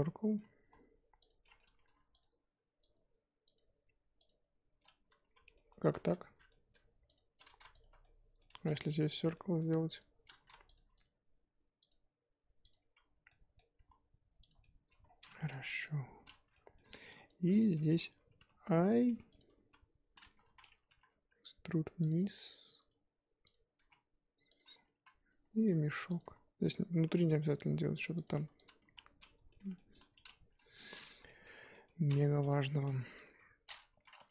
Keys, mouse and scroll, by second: 0.0-0.6 middle drag, 0.6 s, 1.4 middle click, 1.6 2, 2.2 alt+click, 4.3 right click, 5.2 ctrl+z, 5.5 middle click, 5.7 z, 6.5 middle click, 7.1 alt+shift+click, 7.5 ctrl+z, 7.8 alt+shift+click, 8.0-8.6 middle drag, 8.6 z, 9.1 alt+shift+click, 9.3 middle click, 10.0 alt+shift+click, 10.4 ctrl+z, 10.7 alt+shift+click, 12.7 right click, 13.2 scroll down 1, 13.3 middle click, 13.7 s, 14.6-15.0 middle drag, 15.0 scroll down 3, 15.5 KP_3, 16.2-16.5 scroll up 2, 16.5-16.8 middle drag, 16.8 3, 17.2 click, 17.6 shift+middle click, 18.4 typing, 19.4 scroll up 2, 19.5 KP_1, 20.5 z, 20.9 e, 22.2 s, 23.4 click, 23.7 s, 24.7 scroll down 3, 24.9 e, 26.2-28.9 typing, 29.5-30.4 middle drag, 30.4 Tab, 31.2 middle drag, 31.5 KP_1, 31.7-32.2 middle drag, 32.2-33.0 scroll up 2, 33.0-34.3 typing, 33.6 scroll up 3.